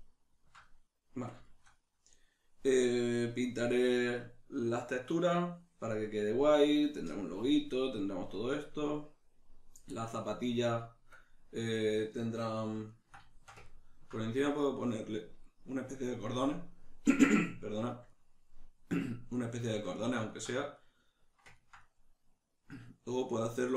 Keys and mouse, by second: 8.5 right click, 12.9-23.7 ctrl+middle drag.